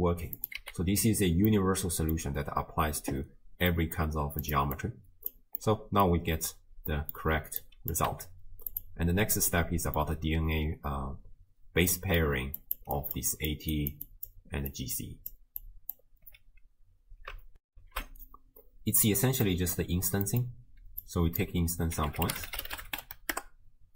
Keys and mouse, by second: 0.4 click, 1.5-2.2 middle drag, 3.7 middle click, 4.5 click, 4.8 click, 5.6 middle click, 6.9 middle click, 7.6 click, 8.1 g, 9.6 middle click, 11.9 middle click, 12.4-16.4 typing, 12.6 click, 13.3 click, 13.7 click, 14.1 click, 14.7 click, 17.7 ctrl+alt+shift+w, 18.0 ctrl+alt+shift+q, 19.5 click, 20.3 click, 21.1-23.9 drag.